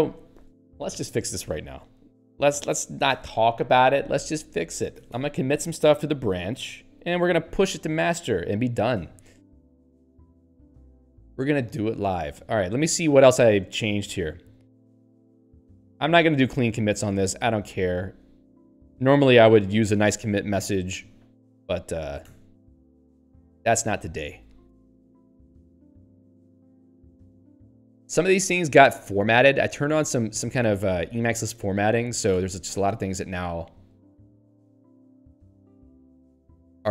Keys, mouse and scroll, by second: 3.1 ctrl+j, 10.1 Return, 12.8 ctrl+alt+;, 15.5 n, 17.6 click, 17.7 click, 22.8 s, 23.8 ctrl+n, 24.3 ctrl+p, 24.7 Tab, 25.1 ctrl+n, 27.3 ctrl+p, 30.2 ctrl+n, 30.6 ctrl+p, 31.0 ctrl+n, 32.8 s, 33.3 ctrl+n, 35.6 s, 36.2 ctrl+n.